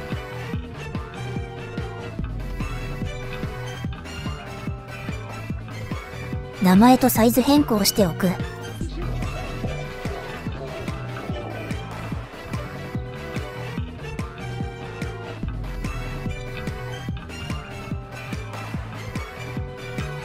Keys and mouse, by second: 6.5 click, 7.7 click, 10.2 Delete, 10.9 click, 11.2-16.3 drag, 13.6 BackSpace, 16.6-18.2 drag.